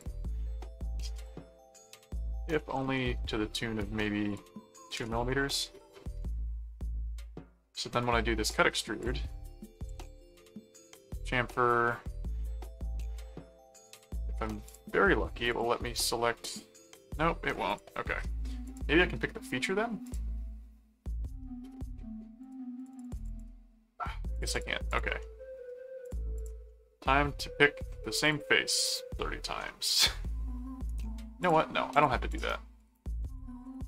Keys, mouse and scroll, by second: 1.2 click, 2.0 click, 4.3 click, 6.2 middle click, 8.1 click, 9.0 click, 9.5-10.9 typing, 12.7 middle click, 13.8 click, 14.7 click, 15.5 click, 17.7 click, 18.6 click, 20.0 click, 22.4 click, 24.3 click, 25.2 middle click, 26.0 click, 26.7-27.8 middle drag, 28.2 click, 29.7 middle click, 30.9 right click, 31.4 click, 32.8-33.8 typing.